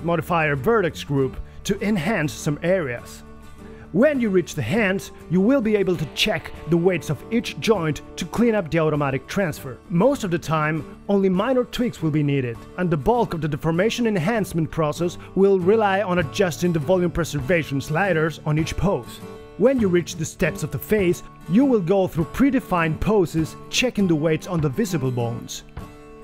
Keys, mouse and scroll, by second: 23.2 g, 23.4 g.